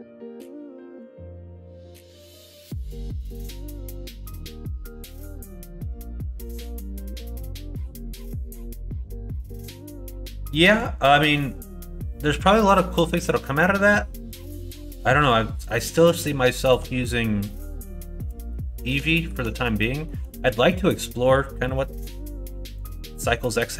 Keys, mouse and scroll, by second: 4.2 ctrl+f, 5.8 click, 6.1 middle click, 6.9 shift+middle click, 7.5 shift+middle click, 7.8 middle click, 8.4 shift+middle click, 9.5 middle click, 10.0 middle click, 10.5 middle click, 11.2 middle click, 11.8 middle click, 12.5 middle click, 14.3 l, 16.0 middle click, 16.6 middle click, 17.0 middle click, 17.7 middle click, 18.1 shift+middle click, 18.8 middle click, 19.2 shift+middle click, 19.9 shift+middle click, 20.5 middle click, 22.7 click.